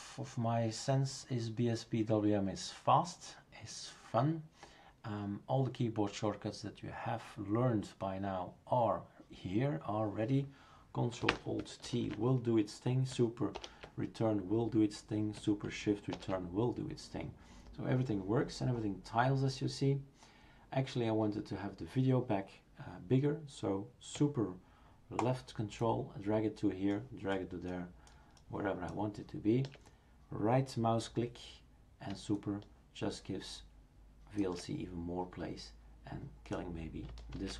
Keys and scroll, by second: 11.8 ctrl+alt+t, 13.5 super+Return, 16.1 shift+super+Return, 37.4 shift+super+q.